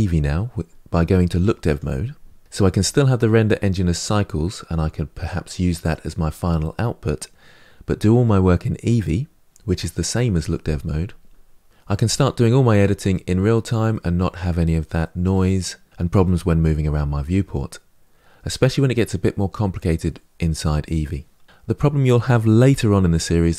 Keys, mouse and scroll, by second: 1.5 click, 12.9-23.5 middle drag.